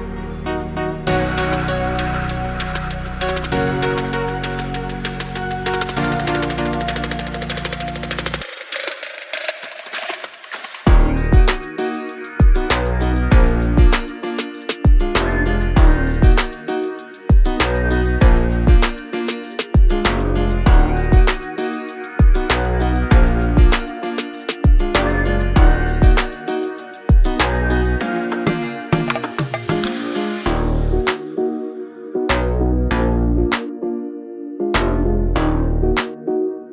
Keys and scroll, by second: 0.0-0.6 typing, 2.9 m, 4.2 space, 6.1 m, 6.8 Up, 7.2-9.9 typing, 10.5 Right, 10.8 Left, 11.4 space, 11.8 e, 12.7 space, 12.8 Escape, 15.1-19.0 typing, 19.6 Delete, 21.9-23.6 typing, 29.3 space, 30.2 m, 31.2 Up, 31.9 space, 32.2 p, 33.5 space, 34.2 Delete, 36.4 l.